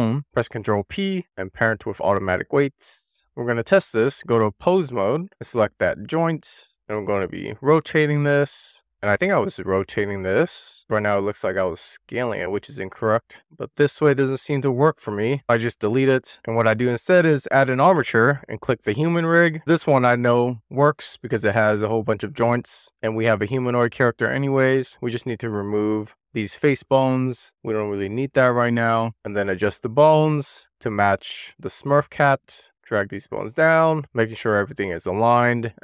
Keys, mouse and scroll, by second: 0.2 right click, 0.8 ctrl+p, 3.0 drag, 3.7 click, 4.3-5.1 drag, 5.9 click, 6.7 click, 8.1 click, 11.8-12.3 scroll down 1, 12.3-13.0 middle drag, 13.1 super+z, 14.0-14.9 middle drag, 15.4 click, 15.7 x, 16.3 scroll down 1, 16.5 shift+a, 20.0 click, 20.8-21.5 scroll up 1, 22.1 scroll up 1, 22.3 middle click, 22.9 middle click, 23.0 scroll up 2, 23.1-23.6 scroll down 4, 23.2 middle click, 23.6-23.9 scroll up 1, 23.9 middle click, 24.6 click, 24.7 middle click, 25.1 click, 25.8 x, 26.2 middle click, 26.6 click, 26.9 x, 27.5 middle click, 27.7 click, 27.9 x, 28.2 click, 28.4 x, 28.7 middle click, 29.0 scroll up 2, 29.1 click, 29.6 middle click, 29.7 scroll down 1, 30.0 super+z, 30.3 click, 30.9 middle click, 31.1 click, 31.2 scroll down 1, 31.6 click, 31.8 scroll up 1, 32.0 click, 32.7 click, 33.0 scroll down 2, 33.3 click, 33.4 super+z, 33.6 click, 33.8 scroll up 1, 33.9 shift+click, 34.6 click, 35.5 shift+click.